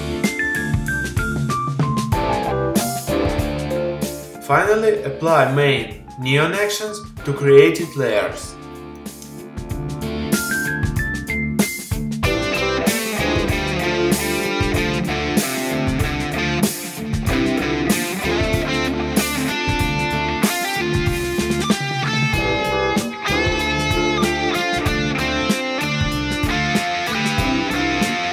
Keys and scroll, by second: 24.2 super+i.